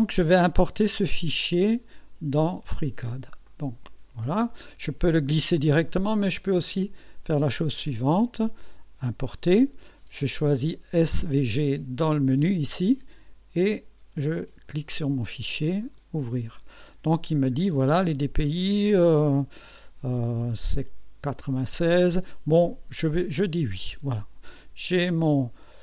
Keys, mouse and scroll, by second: 1.4 click, 3.5 click, 6.8 click, 9.1 click, 14.4 click, 15.8 click, 23.2 click, 24.6 scroll up 1.